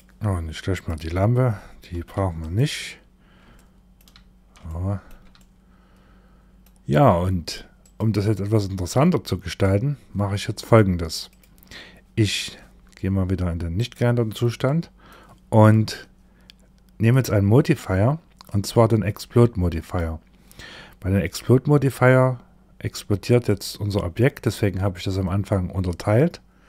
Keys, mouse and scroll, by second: 0.2 click, 1.4 x, 3.0 shift+middle click, 3.6-4.0 scroll down 1, 4.1 shift+middle click, 4.8 middle click, 6.4-7.2 scroll up 1, 7.2 click, 10.7 click, 13.2 click, 14.1 middle click, 16.5 click, 17.9 click, 22.9 click.